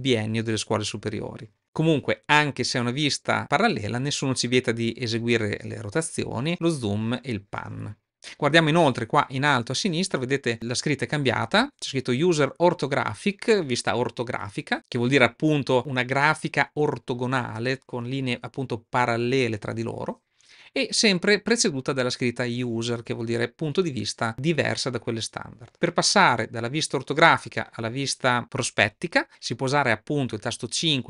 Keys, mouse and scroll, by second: 3.8-6.5 middle drag, 7.7-8.1 shift+middle drag.